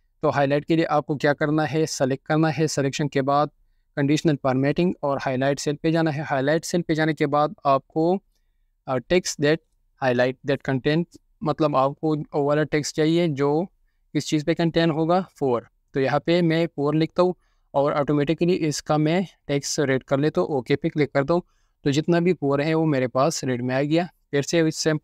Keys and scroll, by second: 16.3-17.9 typing.